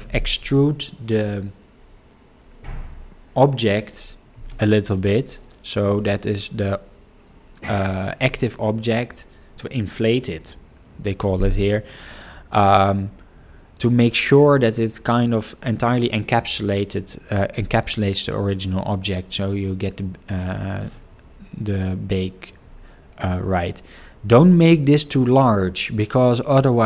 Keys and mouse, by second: 24.3-26.8 drag.